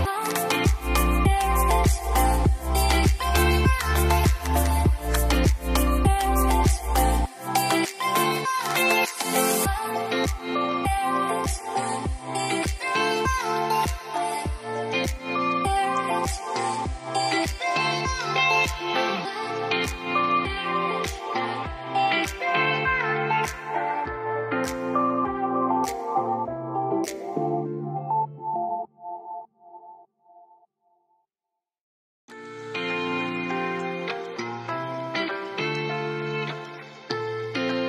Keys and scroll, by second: 0.5-1.9 typing, 5.5 typing, 7.3-8.1 typing, 28.8 typing, 31.0-31.8 typing, 33.6-34.3 typing, 36.2-37.1 typing.